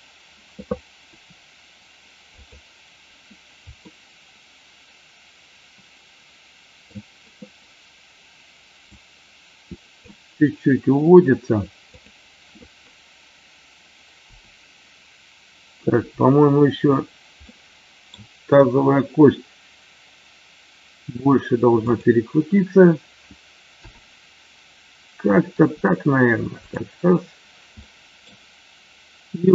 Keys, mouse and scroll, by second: 1.1 r, 3.8-6.9 middle drag, 9.0 click, 11.9 click, 17.4 middle click, 21.7 click, 25.5 r, 27.7 middle click.